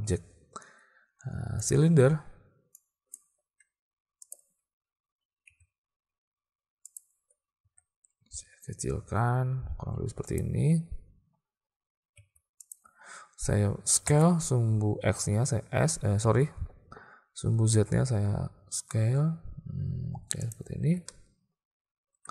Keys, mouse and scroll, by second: 2.8-3.2 drag, 4.4 `, 5.5 r, 7.7 s, 12.2 s, 14.1 s, 20.9 alt+a, 21.1-22.3 drag.